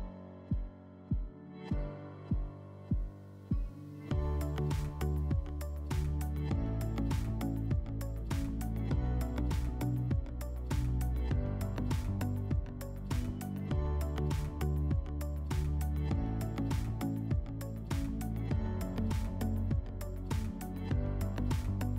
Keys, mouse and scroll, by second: 0.0 click, 0.7-3.7 typing, 1.0 click, 1.5 Tab, 2.6 Tab, 4.1 Return, 10.6 click, 12.6 right click, 13.3 right click, 14.6 click, 15.3 right click, 16.2 alt+w, 18.0-19.6 middle drag.